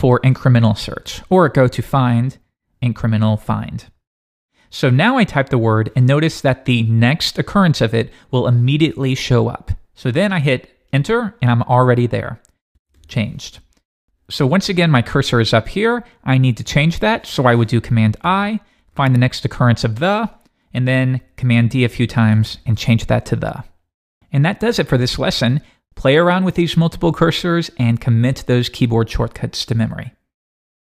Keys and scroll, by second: 10.9 Return, 18.2 super+i, 20.3 Return, 21.0 super+d.